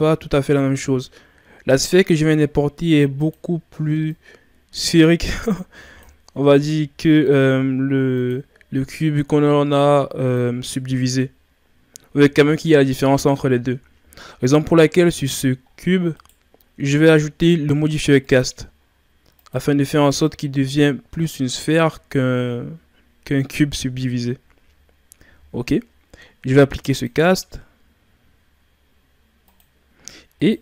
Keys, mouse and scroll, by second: 2.1 s, 4.1-6.4 drag, 6.4 s, 8.8-11.9 drag, 14.4-15.1 scroll up 2, 15.1-15.7 scroll down 2, 15.7-16.2 shift+scroll up 1, 16.2 right click, 19.5-21.2 drag, 26.9-29.9 drag, 30.3 right click.